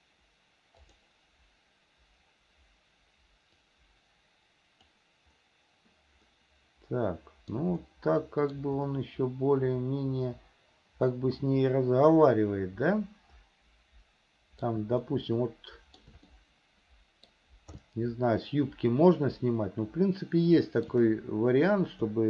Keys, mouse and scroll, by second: 1.0 click, 3.7-5.3 drag, 6.6-7.9 middle drag, 8.1 shift+middle click, 9.2-15.0 middle drag, 15.3-16.4 shift+middle drag, 16.6-17.6 middle drag, 18.1-21.3 shift+middle drag.